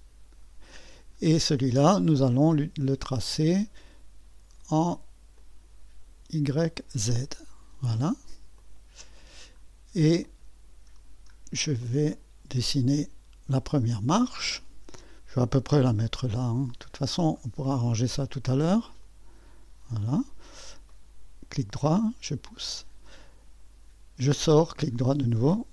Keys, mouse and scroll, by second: 1.2-2.4 scroll down 2, 2.4-2.9 scroll down 1, 2.9-11.5 drag, 11.5 middle click, 11.8-13.0 right drag, 14.4-23.5 drag, 24.3 click.